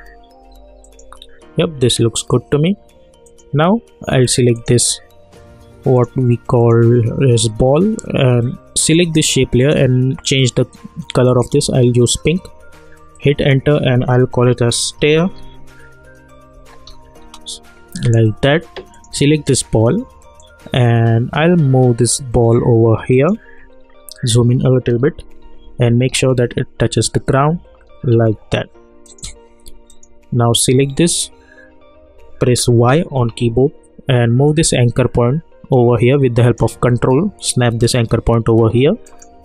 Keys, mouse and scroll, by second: 8.8 click, 13.4 Return, 14.2-17.0 typing, 17.2 Return, 18.9-23.7 drag, 23.7-24.5 alt+scroll up 1, 25.2 Down, 27.8 Up, 28.2 Down, 29.0 click, 32.7 y, 34.5-39.0 drag.